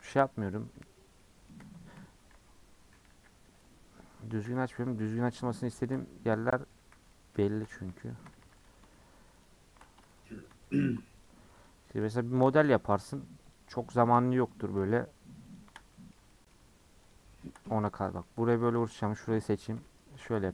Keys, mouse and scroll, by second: 1.6 Tab, 2.3 /, 2.8 /, 3.7-4.4 scroll down 2, 4.4 h, 4.9 click, 5.1 Tab, 5.3 middle click, 5.5 scroll down 1, 5.7 shift+middle click, 6.0 scroll up 2, 6.3 middle click, 6.8 3, 7.1-8.3 middle drag, 8.3 2, 8.6 alt+click, 11.2 alt+shift+click, 11.6 alt+shift+click, 12.2 alt+shift+click, 12.8 alt+shift+click, 13.5 alt+shift+click, 14.0 alt+shift+click, 14.5 alt+shift+click, 15.0 alt+shift+click, 15.5 alt+shift+click, 15.9-17.1 middle drag, 17.1 alt+shift+click, 17.6 middle click, 17.9 3, 18.8 alt+click, 19.7 ;.